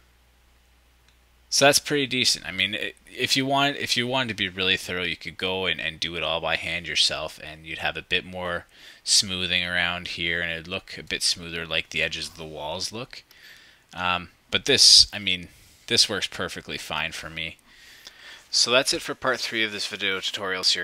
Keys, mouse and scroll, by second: 2.0 click, 13.9 click, 16.4 ctrl+click, 17.0-18.8 ctrl+drag.